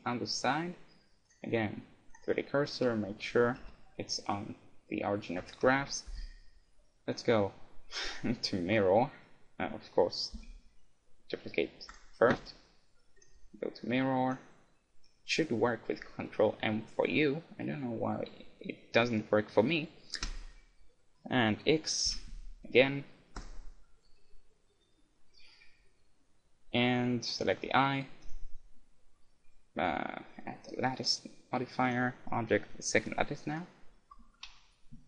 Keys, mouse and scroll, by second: 0.5 right click, 1.3-3.1 drag, 3.6 shift+c, 5.8 KP_1, 7.1-9.0 drag, 10.4 shift+d, 12.4-13.9 right drag, 13.2-15.0 drag, 25.1-26.8 middle drag, 27.0 middle click, 27.3 right click, 28.2-29.4 middle drag, 29.4 click, 31.9-33.6 drag, 33.9-35.0 middle drag, 34.4 KP_1.